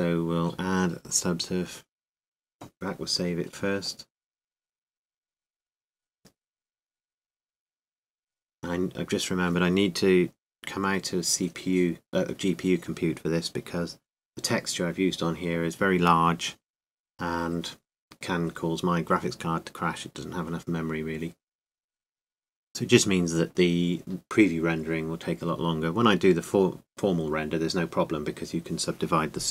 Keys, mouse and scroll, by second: 0.0 Tab, 0.8 Tab, 1.3 Tab, 5.8-16.1 drag, 26.9 click, 27.8 middle click.